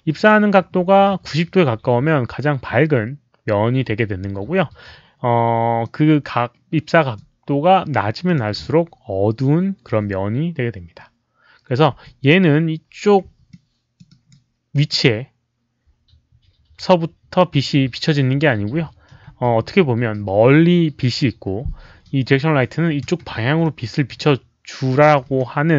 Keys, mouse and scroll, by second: 0.1 click, 1.2 click, 1.2 e, 5.8-7.1 drag, 8.2 click, 11.9 w, 13.4 alt+click, 14.0 alt+right click, 14.7 alt+click, 19.3 w, 23.0 e, 23.6-24.1 drag, 25.3 w.